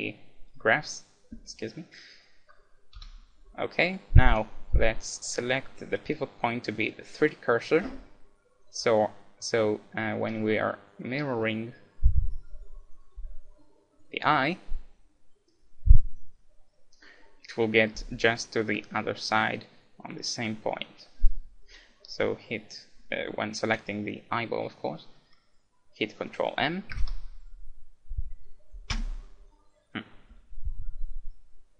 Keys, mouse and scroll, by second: 3.0 KP_1, 4.3-6.0 drag, 8.2-11.5 middle drag, 23.7-25.7 right drag.